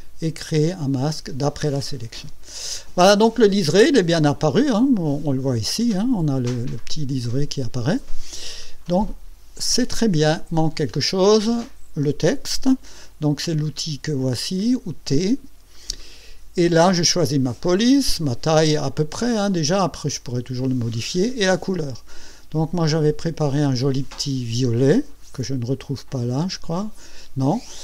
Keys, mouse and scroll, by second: 6.8 click, 7.2 click, 8.5 middle click, 8.8-9.9 drag, 10.2-11.3 middle drag, 15.1 t, 19.0 scroll down 2, 22.9 click, 26.2 click.